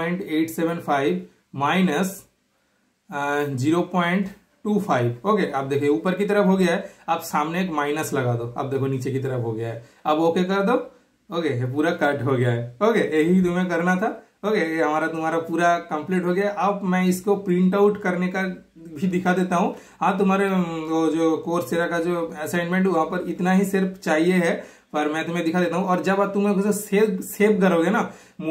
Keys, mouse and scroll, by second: 12.9-13.2 super+scroll up 1, 14.0 super+scroll up 1, 14.2-15.8 shift+super+middle drag, 15.8 super+scroll down 1, 16.9 super+scroll up 1, 18.3 super+scroll down 1, 19.2-19.7 super+scroll up 2, 19.5 typing, 19.7 super+middle click, 20.0 super+scroll down 1, 20.8 super+scroll up 1, 21.6-23.1 super+scroll up 1, 21.6 typing, 23.1 super+click, 24.1 super+click, 24.1 typing.